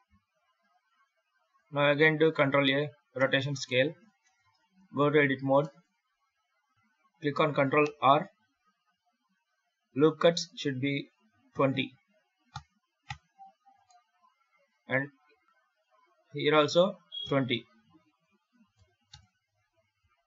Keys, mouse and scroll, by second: 2.0 ctrl+a, 3.5 shift+middle click, 4.1 Tab, 5.1 scroll up 2, 5.5 shift+middle click, 6.0 scroll up 2, 7.7 ctrl+r, 13.6 scroll down 1, 13.7 middle click, 15.2 ctrl+r.